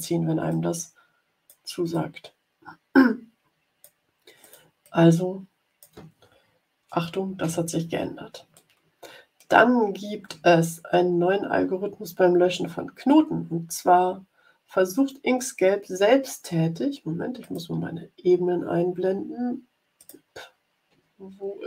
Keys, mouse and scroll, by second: 0.4-1.6 drag, 1.9-3.9 drag, 4.3 click, 4.8-5.9 drag, 7.4 Delete, 8.5-9.5 drag, 10.4-10.8 ctrl+scroll down 2, 12.7 scroll down 2, 13.4-14.1 scroll down 4, 14.8-15.4 ctrl+scroll down 4, 16.4-16.8 ctrl+scroll up 2, 17.3 click, 19.9 click, 21.0-21.6 ctrl+scroll down 4.